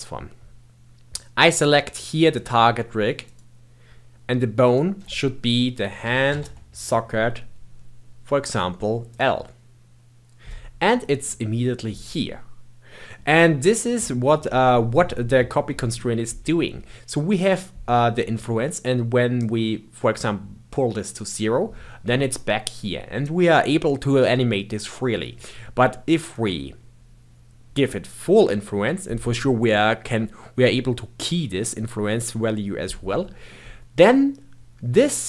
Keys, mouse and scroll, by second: 2.3 click, 4.5-7.7 drag, 11.2-14.2 middle drag, 19.3-22.4 drag, 26.2-29.2 drag, 33.0-35.2 middle drag.